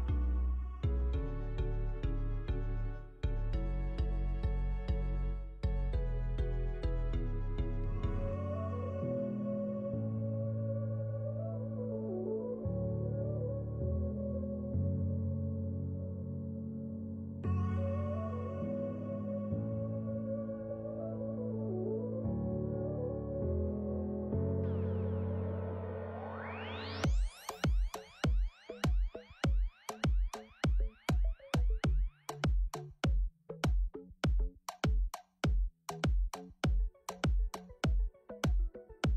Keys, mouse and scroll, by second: 15.6 n, 15.9 shift+t, 16.5 middle click, 16.8 middle click, 17.2 click, 17.3 click, 17.5 g, 17.8 click, 18.0 g, 18.6 shift+t, 19.1 middle click, 19.7 click, 20.1 click, 20.7 click, 20.9 middle click, 21.1 scroll up 1, 21.2 click, 21.4 middle click, 21.7 shift+d, 22.8 middle click, 23.2-25.7 typing, 23.5 middle click, 24.8 middle click, 25.0 middle click, 26.3 middle click, 26.8 shift+t, 27.9 click, 28.2 click, 28.6 KP_0, 28.9 click, 29.2 click, 29.5 KP_0, 29.7 click, 30.2 click, 30.7 KP_0, 31.4 click, 31.6 middle click, 31.8-32.9 scroll up 7, 32.4 middle click, 32.9 middle click, 33.4-34.0 scroll down 5, 33.6 middle click, 34.0 click, 34.0 click, 34.5 click, 34.9 click, 35.7 click, 36.0 click, 36.3 click, 36.9 click, 37.3 click, 37.8 click, 38.0 scroll down 1, 38.1-38.4 scroll up 2, 38.4 click.